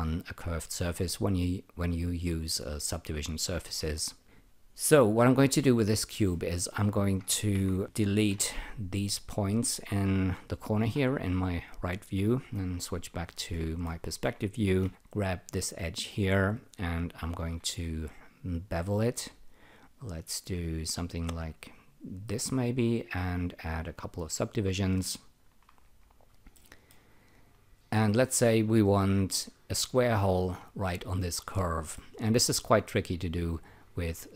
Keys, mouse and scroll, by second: 5.8 F3, 7.3-8.8 typing, 9.2 click, 10.8 Delete, 12.4 F1, 13.5 alt+middle click, 14.6-15.4 typing, 15.4 click, 17.4 typing, 18.0 click, 23.7 click, 23.8 double click, 24.0 click, 24.2 click, 24.4 double click, 26.5 alt+middle click, 27.1 alt+click, 31.9 alt+middle click, 34.1 alt+click.